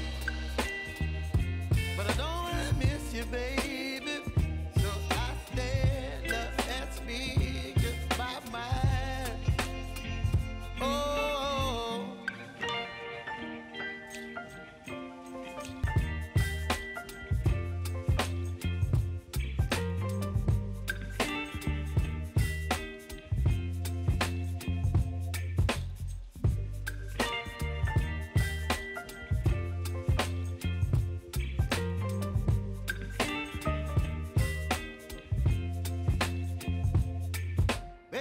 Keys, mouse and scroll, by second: 2.2 s, 2.7 click, 3.8 v, 4.6-13.1 drag, 13.7 shift+click, 14.8 p, 15.7-20.8 drag, 21.2 u, 22.9 click, 25.1-30.5 typing, 31.6 click, 32.2 -, 33.8 click, 35.0 ctrl+alt+Home, 35.6 v, 36.6-38.2 drag.